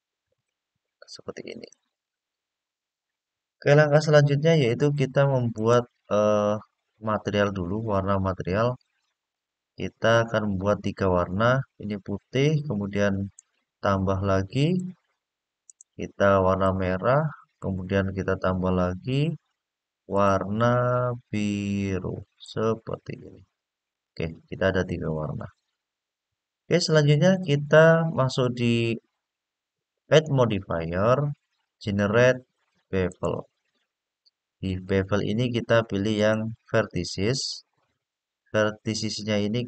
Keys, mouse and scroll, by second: 1.4 click, 3.8-5.0 scroll down 4, 5.3 click, 9.0 click, 13.1 click, 14.3 click, 15.4 click, 17.2 click, 18.8 click, 19.9 click, 20.9 click, 23.7 click, 28.5 click, 29.8-33.0 drag, 35.9 click, 37.4-38.1 scroll up 3.